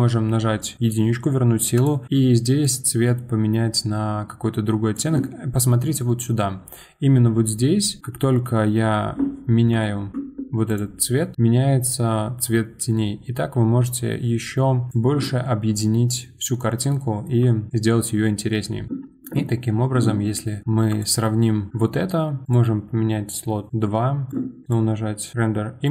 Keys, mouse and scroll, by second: 1.7 click, 6.5-7.0 scroll up 7, 7.3-7.6 scroll down 2, 7.6 scroll up 2, 9.8 shift+middle click, 10.7 click, 15.6 scroll down 4, 16.9-17.4 shift+middle drag, 17.4-17.7 scroll down 4, 17.8-19.4 scroll up 3, 20.9-21.7 drag, 24.6-25.9 drag.